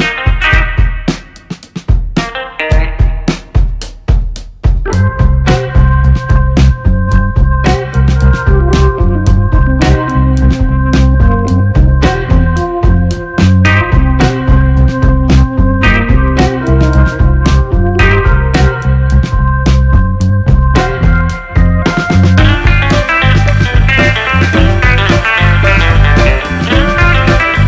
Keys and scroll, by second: 1.7-5.3 typing, 7.0 ctrl+c, 7.4 ctrl+v, 10.0 shift+a, 16.3 8, 16.7 Return, 19.8 1, 20.3 Return, 23.1 1, 23.3 2, 23.4 Return.